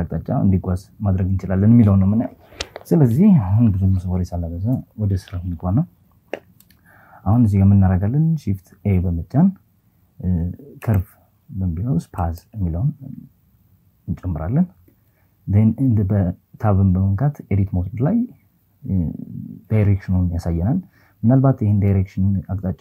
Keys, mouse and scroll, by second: 3.3 KP_7, 7.5 shift+a, 14.3 Tab.